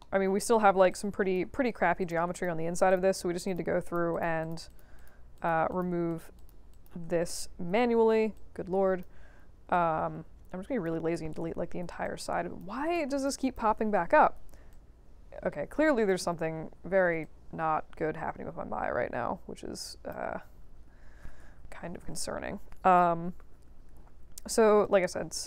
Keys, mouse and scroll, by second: 0.8 alt+click, 2.0 click, 2.3 shift+click, 2.8 shift+click, 3.4 click, 3.8 click, 4.1 click, 4.4 click, 4.6 click, 4.9 click, 5.3 click, 5.7 click, 6.0 shift+click, 6.3 shift+click, 6.7 shift+click, 8.3-9.0 alt+drag, 9.7-10.8 drag, 12.0-12.6 alt+drag, 12.8 click, 13.1 shift+click, 13.4 shift+click, 14.7-16.0 alt+drag, 16.2 ctrl+z, 16.6 ctrl+z, 17.2-20.1 alt+drag, 20.3 ctrl+z, 20.6 ctrl+z, 20.8 ctrl+z, 21.0 ctrl+z, 21.2 ctrl+z, 21.4 ctrl+z, 21.6 ctrl+z, 21.8 ctrl+z, 22.0 ctrl+z, 23.6 ctrl+z, 23.8 ctrl+z, 24.0 ctrl+z, 24.2 ctrl+z, 24.4 ctrl+z, 24.6 ctrl+z, 24.8 right click.